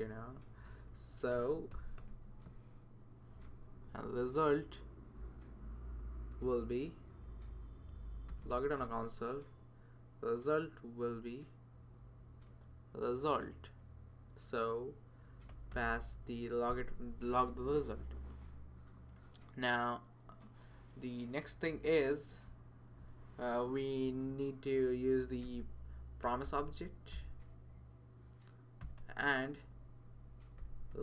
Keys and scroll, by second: 0.0-2.5 typing, 3.2 Right, 4.9 Right, 7.1 Left, 8.3 typing, 8.8 Return, 10.9 typing, 15.2-16.0 typing, 16.7 Return, 24.0 Return, 24.2 Return, 25.4-31.0 typing.